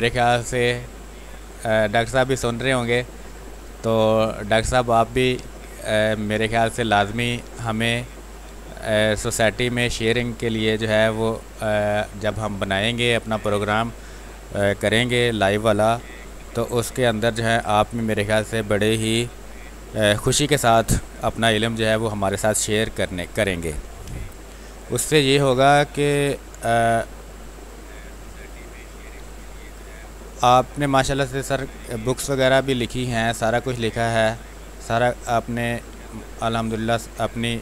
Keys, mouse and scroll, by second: 11.3 space, 11.9 alt+click, 12.5 click, 15.8 r, 16.2 click, 16.5-21.1 drag, 21.1 b, 21.4 ctrl+space, 21.7 ctrl+click, 22.1 click, 22.4 space, 22.7 r, 22.9 click, 23.7 b, 24.0 space, 24.5 ctrl+click, 24.8-28.4 drag, 28.4 space, 28.6 click, 28.9 space, 29.6-36.4 drag, 36.4 space, 36.5 click, 37.0 space.